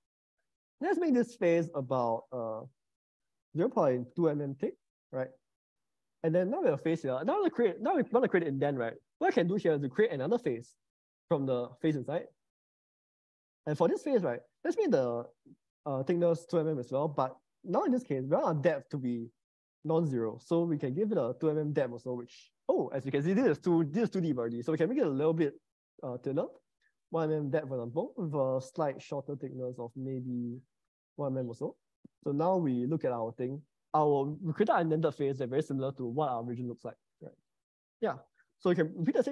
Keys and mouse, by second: 2.2-4.3 drag, 3.5 0, 5.9-9.2 middle drag, 10.5 click, 11.8 F7, 11.8 typing, 14.0-16.5 drag, 15.5 0, 17.9-21.2 drag, 20.2 0, 22.2 middle click, 24.9-26.6 drag, 28.0-30.9 drag, 36.9-38.0 middle drag, 38.4 middle click.